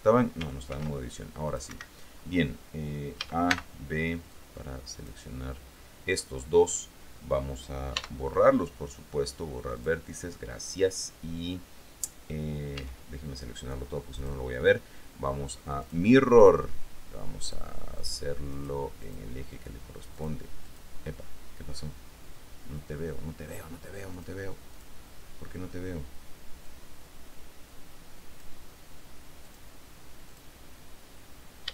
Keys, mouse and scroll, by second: 0.9 ctrl+r, 1.7 click, 1.9 Escape, 3.3 a, 3.7 b, 4.5 click, 8.1 x, 9.9 click, 12.9 a, 14.3 click, 16.0 click, 17.6 click, 18.1 click, 18.7 click, 19.2 click, 20.3-24.6 drag, 24.9 click, 26.8-28.9 drag, 29.6 click, 30.5 click.